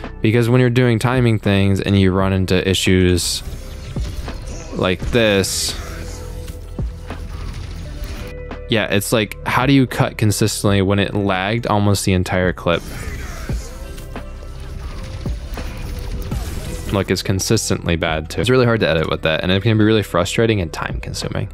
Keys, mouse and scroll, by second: 1.8 click, 2.5 middle click, 3.0 space, 4.2 middle click, 8.0 space, 9.1 scroll up 1, 9.7 scroll up 1, 11.6 click, 12.3 space, 12.7 middle click, 16.8 space.